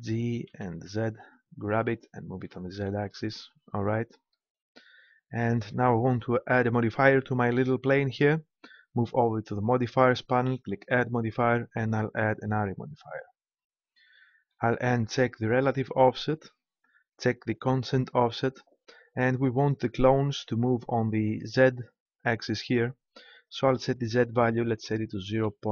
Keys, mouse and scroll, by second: 0.4 g, 2.4-4.3 drag, 9.6-12.8 drag.